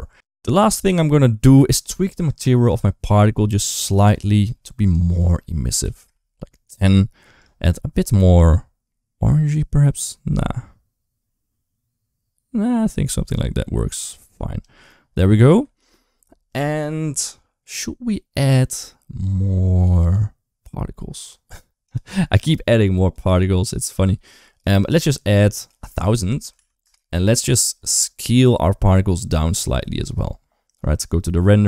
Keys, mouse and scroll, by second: 4.7-5.9 drag, 15.2 right click, 15.6 ctrl+s, 25.4-26.7 drag, 26.4 0.